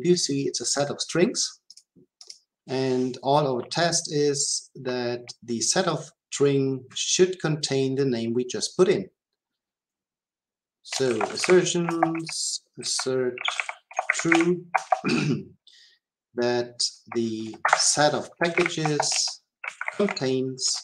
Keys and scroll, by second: 11.9 Return, 17.6 Escape, 18.8 Return.